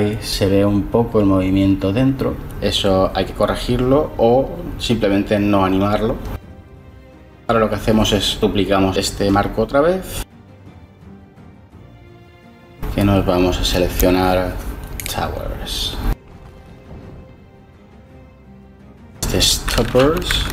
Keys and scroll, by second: 9.6 shift+d, 13.3 t, 13.7 o, 17.7 F2, 20.3-20.5 typing.